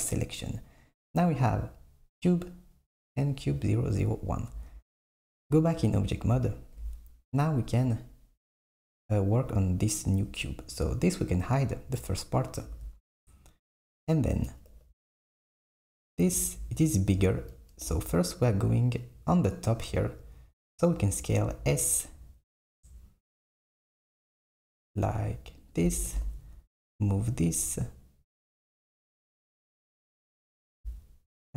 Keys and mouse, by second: 1.0 click, 2.4 click, 3.4 click, 4.6 Tab, 6.2 click, 7.7 click, 11.3 click, 12.8 s, 14.8 KP_1, 17.9 KP_7, 21.5 s, 26.2 g, 30.8 KP_1.